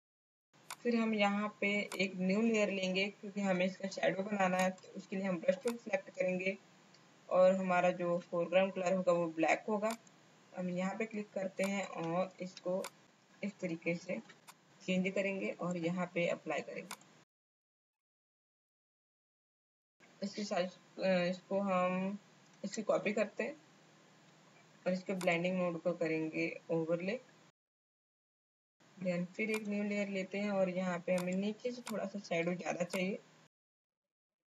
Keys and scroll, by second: 19.2 Left, 19.4 Left, 19.4 Down, 19.4 Down, 19.6 Left, 19.7 Up, 22.9 ctrl+j, 27.8 space, 28.4 space.